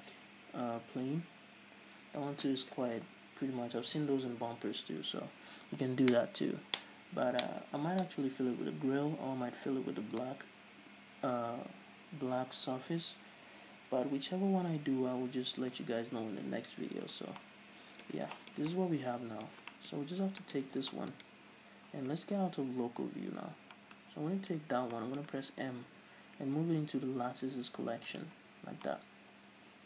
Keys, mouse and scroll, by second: 17.6-17.9 scroll down 1, 20.4-20.9 scroll up 1, 21.7 right click, 23.5 KP_Divide, 24.5-29.8 middle drag, 25.1-25.5 scroll up 1, 26.4 m, 29.1 scroll down 2.